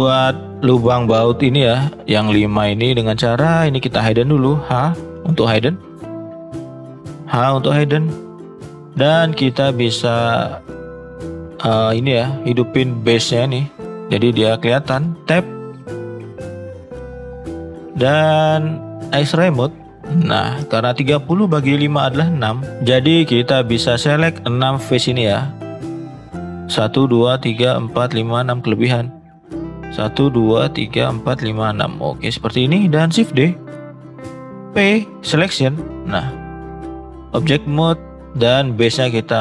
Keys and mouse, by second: 0.0-0.7 middle drag, 4.7 h, 5.1 middle click, 6.4 click, 7.4 h, 7.9 middle drag, 9.7 click, 10.2 middle drag, 10.7 middle click, 14.9 Tab, 17.2 shift+middle click, 20.2 shift+middle drag, 22.8 click, 23.8 click, 24.2 shift+click, 25.1 shift+click, 25.8 shift+click, 33.2 shift+d, 34.6 p, 36.8 click, 39.3 click.